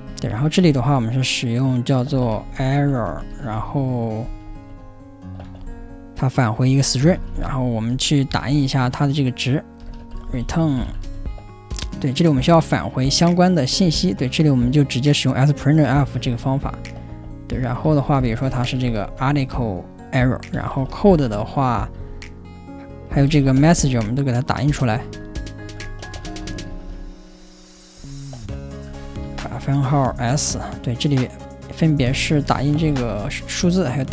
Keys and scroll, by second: 0.0-11.6 typing, 7.9 Escape, 13.7 ctrl+n, 17.6-34.1 typing, 18.8 ctrl+n, 25.7 ctrl+w.